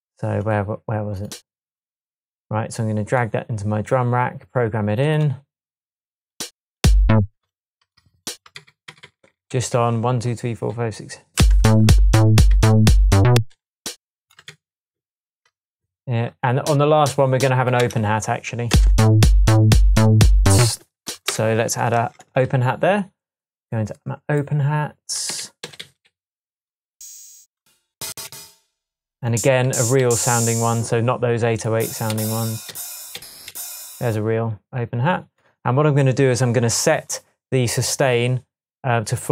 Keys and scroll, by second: 6.8 space, 8.6 d, 11.4 space, 15.0 super+d, 17.8 BackSpace, 18.7 space, 20.6 space, 21.3 BackSpace, 21.9 BackSpace, 22.0 Tab, 25.3 Left, 25.6 Down, 25.8 Right, 27.9 Up, 29.7 Down, 32.1 Up, 32.7 Down, 33.5 Up.